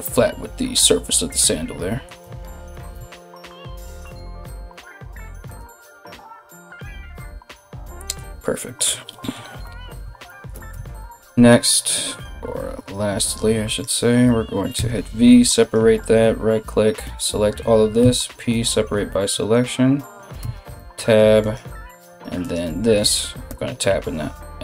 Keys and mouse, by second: 1.8 Tab, 2.3 right click, 2.5 Tab, 3.6 right click, 4.3 g, 6.1 Tab, 10.3 Tab, 12.4 z, 13.3 alt+right click, 13.4-24.6 alt+middle drag, 14.3 v, 16.6 l, 17.6 p, 20.0 Tab, 21.0 right click, 22.0 right click.